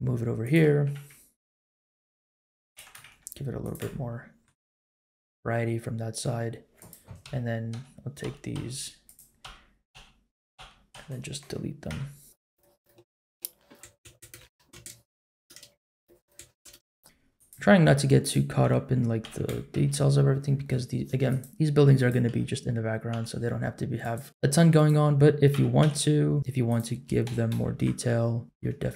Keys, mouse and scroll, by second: 0.7 r, 2.7 g, 3.8 shift+middle click, 4.6-6.2 middle drag, 6.8 click, 7.2 l, 8.2 l, 8.5 l, 9.0 click, 9.4 l, 10.5 l, 11.5 l, 11.9 x, 12.8 click, 12.9 middle click, 13.3 middle click, 13.7 click, 13.8-16.6 typing, 15.2 shift+middle click, 16.2 click, 18.2 click, 18.6 l, 19.2 g, 21.9 click, 22.2 l, 23.1 l, 24.0-24.9 drag, 25.5 s, 27.2 g, 28.4 shift+middle click.